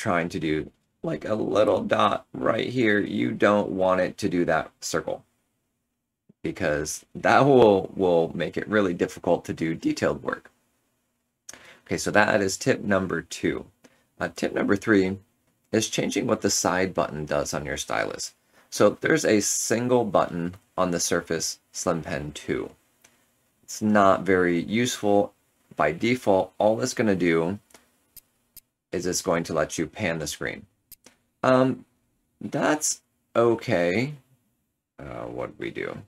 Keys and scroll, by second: 5.9 Return, 6.5 ctrl+z, 6.5 ctrl+z, 32.1 ctrl+z.